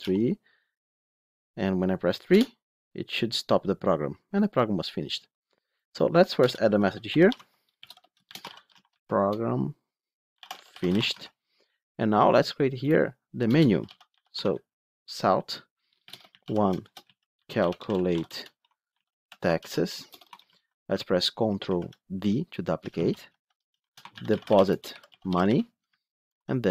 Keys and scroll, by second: 7.3 Tab, 11.4 Tab, 14.3 Tab, 18.4 Tab, 21.6 ctrl+d, 22.8 ctrl+shift+Left, 26.1 ctrl+d.